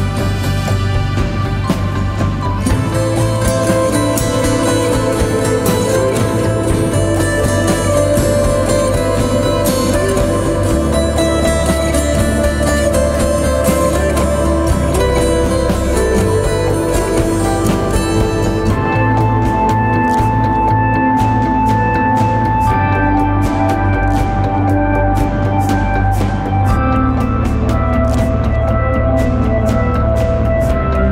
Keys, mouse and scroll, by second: 1.6 right click, 7.0 double click, 12.8 double click, 29.3 right click, 30.6 double click.